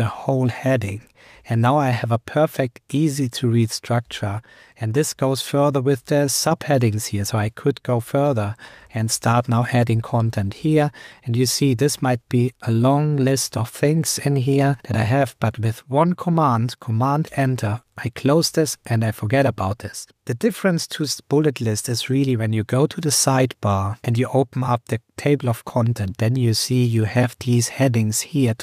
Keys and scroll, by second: 0.1 super+Left, 1.4 super+Return, 1.8 Up, 4.0 super+Return, 6.1 Down, 6.8 Right, 7.2 Down, 8.0 super+Right, 11.4 Up, 13.2 super+Return, 14.3 Down, 14.6 super+Return, 15.0 Up, 17.2 super+Return, 19.4 super+Return.